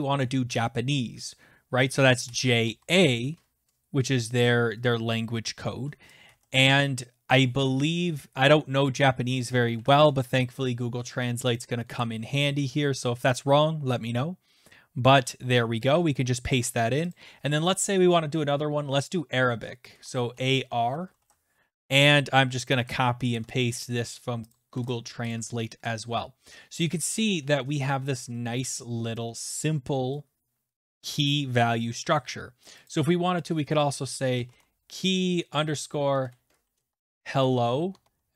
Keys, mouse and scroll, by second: 2.2-2.6 typing, 6.2 Down, 9.0 click, 9.7 ctrl+c, 11.5 click, 11.9 ctrl+v, 13.3 click, 17.1 click, 19.9-21.1 typing, 22.6 click, 23.3 ctrl+c, 24.5 click, 24.7 ctrl+v, 25.3 click, 29.1 click, 32.9 click, 33.5 click, 34.0-38.3 typing.